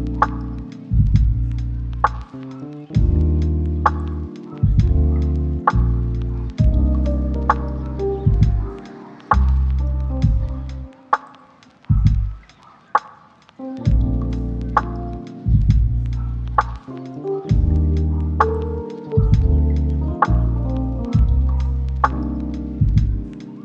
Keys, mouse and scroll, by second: 3.0 right click, 3.7 scroll down 1, 3.9-4.4 scroll up 2, 4.0 right click, 4.4 click, 7.7 scroll down 1, 7.8 scroll up 1, 7.9 click, 9.2 scroll up 1, 9.4 right click, 9.7 click, 19.5 right click, 19.9-20.6 scroll up 1, 20.6-21.2 scroll down 1, 21.2 scroll up 1, 21.3 right click, 21.9 scroll up 1, 22.1 right click, 22.7-23.0 scroll up 1, 23.0 click.